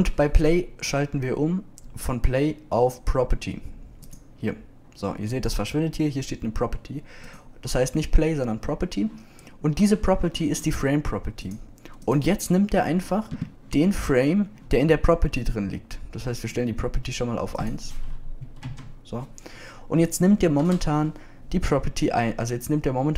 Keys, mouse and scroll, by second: 9.2-10.7 drag, 14.9-15.8 drag.